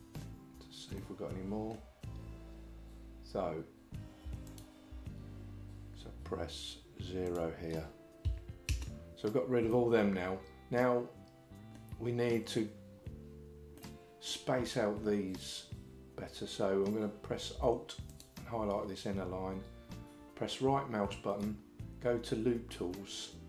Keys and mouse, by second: 1.0 shift+middle click, 7.5-8.8 drag, 9.7-11.8 middle drag, 13.8 middle click, 18.1 alt+click.